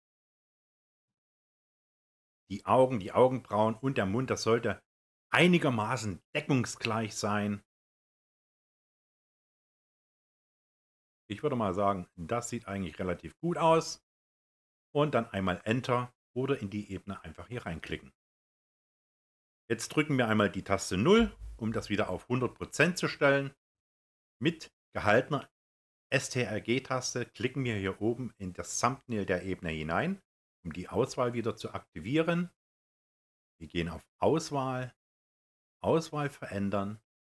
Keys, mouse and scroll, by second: 26.1-30.5 ctrl+drag.